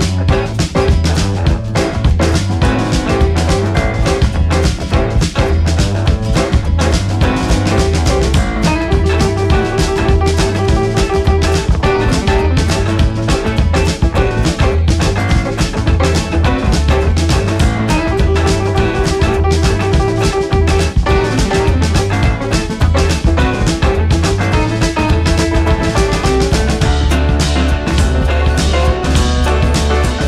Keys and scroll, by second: 27.1 ctrl+=.